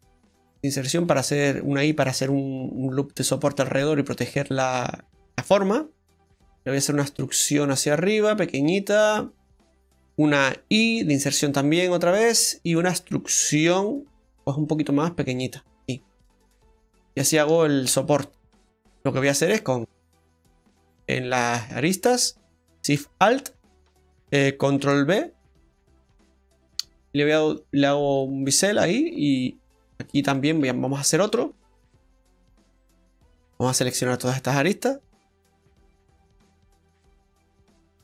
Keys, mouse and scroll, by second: 4.6 middle click, 6.4 e, 9.8 middle click, 10.7 i, 12.4 middle click, 13.6 e, 16.7-18.1 scroll up 2, 17.2 shift+middle click, 18.1 middle click, 19.6 right click, 20.9 click, 21.7 right click, 23.1 alt+shift+right click, 24.8 ctrl+b, 28.0 scroll up 1, 28.5 middle click, 29.6 right click, 29.8 right click, 30.1 alt+shift+right click, 30.9 shift+right click, 31.5 shift+right click, 32.6 middle click, 33.4 shift+right click, 33.9-38.0 shift+right click.